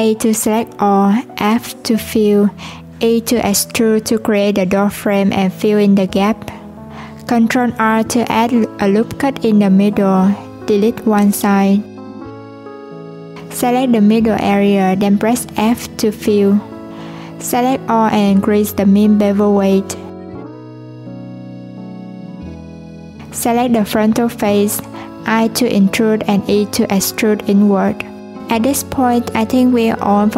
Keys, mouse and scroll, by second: 1.7 f, 6.9 click, 8.0-9.1 scroll up 1, 9.1 ctrl+r, 11.2 click, 12.2 x, 14.0 click, 15.4 f, 16.7 a, 18.0-19.3 drag, 19.3 alt+z, 21.1 3, 22.1 click, 25.0 i.